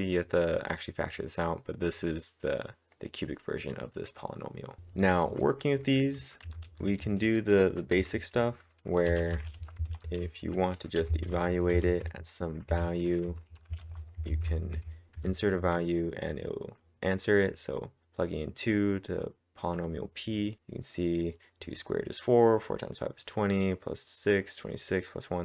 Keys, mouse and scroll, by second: 0.0-4.8 drag, 4.8 typing, 6.4 j, 9.3-13.8 typing, 14.3 ctrl+`, 14.8 Up, 15.2 Return.